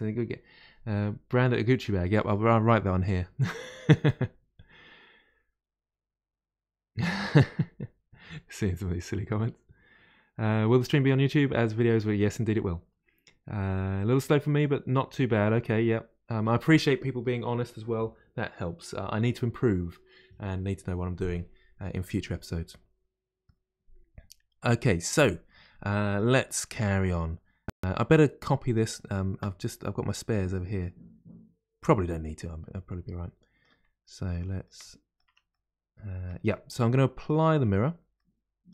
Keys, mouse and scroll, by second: 2.1-5.1 middle drag, 21.1-27.9 middle drag, 27.9-28.4 scroll down 1, 28.4-31.5 middle drag, 32.3-32.9 scroll up 2, 32.9-33.9 middle drag, 33.9-34.8 scroll up 2, 34.8 middle click, 35.3 Tab, 35.5 middle click, 36.5-36.9 scroll down 5, 36.9 middle click, 37.5 Tab, 38.2-38.7 middle drag.